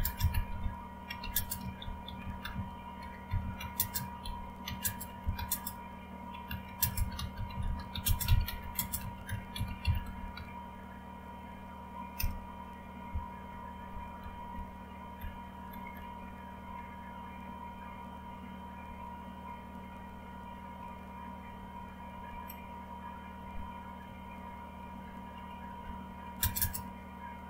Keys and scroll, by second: 0.0-10.8 typing, 12.0-15.0 typing, 15.9 Down, 18.6-19.4 typing, 20.5-22.1 typing, 23.1-26.6 typing.